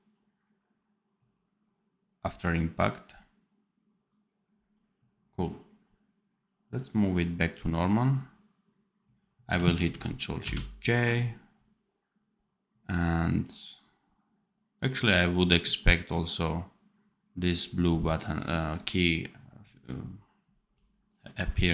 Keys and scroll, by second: 10.3 ctrl+shift+j.